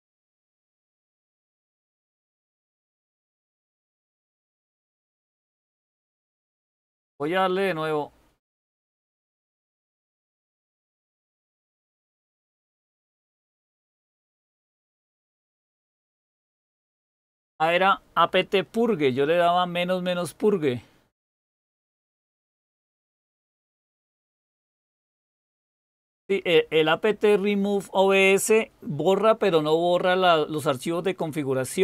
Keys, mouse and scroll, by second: 2.3-4.6 typing.